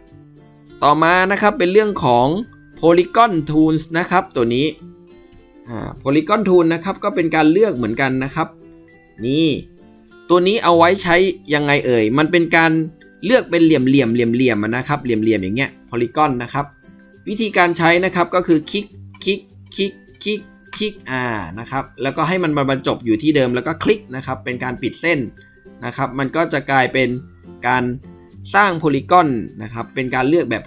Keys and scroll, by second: 4.9 ctrl+z, 4.9 typing, 6.9 typing.